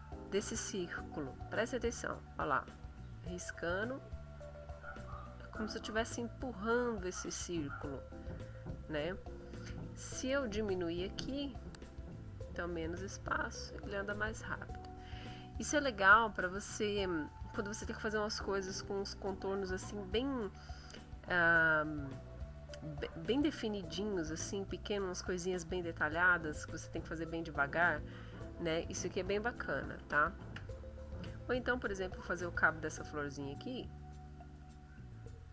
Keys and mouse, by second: 1.9-7.9 drag, 10.4 click, 12.3-14.9 drag, 29.6 ctrl+z, 32.6 middle click, 33.5-35.5 drag.